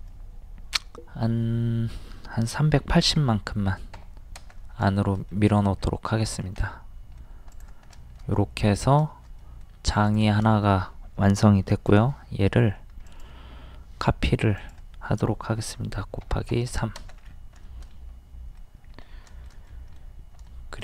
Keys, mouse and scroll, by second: 2.8 KP_3, 3.2 KP_8, 3.2 KP_0, 4.6 space, 4.9 shift+middle click, 5.8 scroll down 1, 6.2 click, 6.6 middle click, 7.5 click, 7.9 middle click, 9.4 middle click, 10.1 click, 10.5 shift+middle click, 11.9 m, 13.1 ctrl+click, 16.2 KP_3, 17.2-17.6 scroll down 1, 17.7 shift+middle click, 18.8 scroll up 1, 19.7 middle click, 20.5-20.8 shift+middle drag.